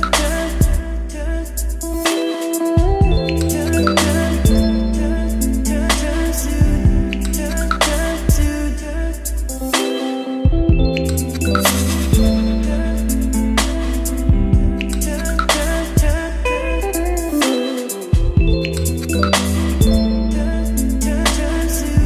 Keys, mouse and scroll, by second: 18.6 middle click, 19.2 click, 19.6-22.0 right drag.